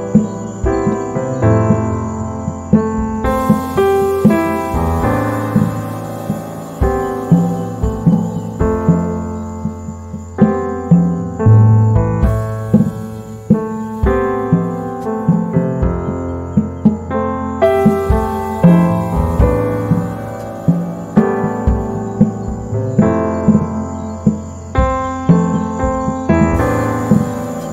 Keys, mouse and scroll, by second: 5.7 z, 5.8 click, 6.2 space, 7.2-10.5 drag, 10.5 z, 10.6 right click, 10.8 space, 12.4 Down, 14.7 z, 14.9 click, 15.4 space, 16.2-18.5 drag, 18.5 Down, 22.5 click, 23.6 z, 23.7 right click, 24.0 space, 25.4 shift+click.